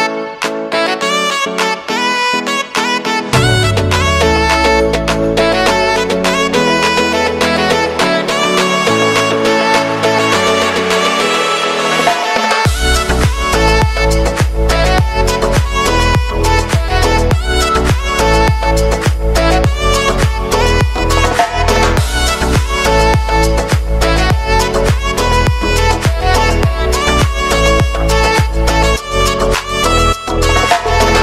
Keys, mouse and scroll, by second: 0.6-3.7 typing, 2.4 click, 5.4 k, 6.3 click, 7.2 Return, 8.0-9.3 drag, 9.6 space, 12.5-15.2 drag, 15.2 F9, 16.1 click, 16.4 space, 19.1 alt+click, 20.1 space, 21.1 click, 21.4 space, 23.0-25.6 drag, 25.6 k, 26.0 click, 27.1 space, 28.3 click, 28.6 space, 30.5 click.